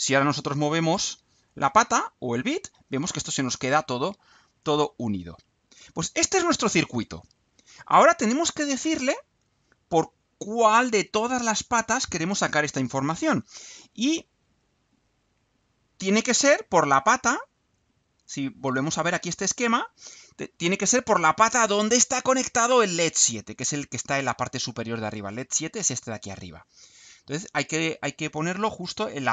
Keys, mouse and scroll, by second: 0.2-5.9 drag, 6.2 click, 15.8 click, 17.5 click, 18.4 click.